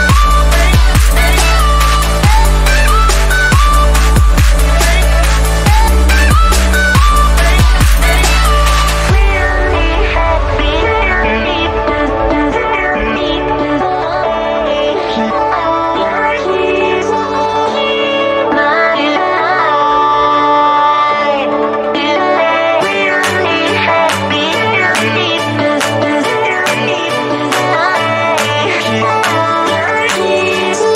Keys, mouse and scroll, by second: 0.5 click, 2.5-4.0 drag, 8.6-11.1 drag, 11.1-17.9 drag, 20.9 click, 22.0 ctrl+], 23.5 click, 24.4 scroll down 1, 25.4 click, 28.1 click.